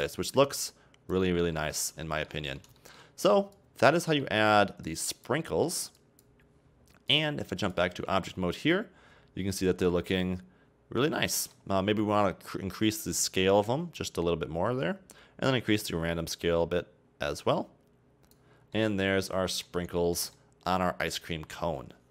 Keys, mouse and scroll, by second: 1.6-3.6 middle drag, 3.6-4.2 drag, 4.2-4.9 middle drag, 4.9-5.4 drag, 5.4-6.0 middle drag, 6.0-8.2 drag, 8.2 scroll down 3, 8.3-11.3 middle drag, 11.4 middle click, 11.6-12.5 scroll up 2, 12.5-14.0 scroll down 10, 14.0-18.6 drag, 18.6 scroll down 2, 18.8-22.1 middle drag.